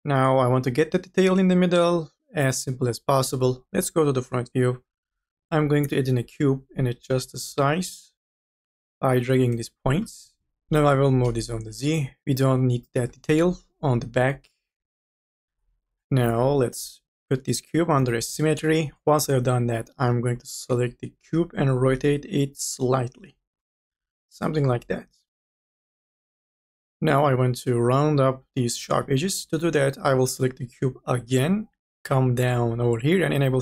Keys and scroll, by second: 0.0-0.3 typing, 13.5 ctrl+z, 21.2 r.